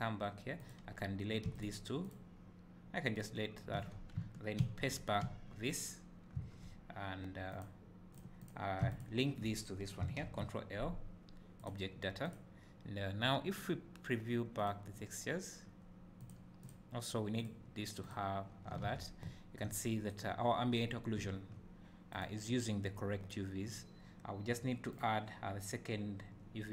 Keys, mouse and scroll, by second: 0.8 click, 1.7 x, 2.1 click, 3.9 a, 4.6 ctrl+v, 5.7 click, 8.4 click, 11.7 ctrl+l, 12.3 click, 14.6 click, 17.8-22.2 drag, 18.8 alt+a, 19.2 `, 21.3 `, 25.0 click.